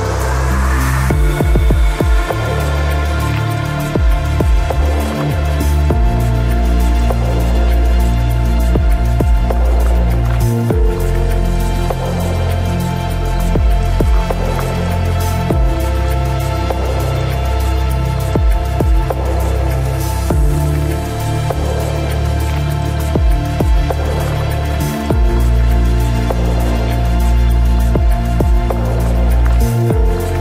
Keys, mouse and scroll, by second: 2.5 ctrl+r, 4.9-7.2 right drag, 6.4 g, 13.7-15.5 right drag, 14.3 c, 18.1 e, 20.7 s, 23.9-25.8 drag, 26.1 s, 27.0-28.8 drag, 27.3 ctrl+s, 28.9 ctrl+Tab, 28.9 middle click.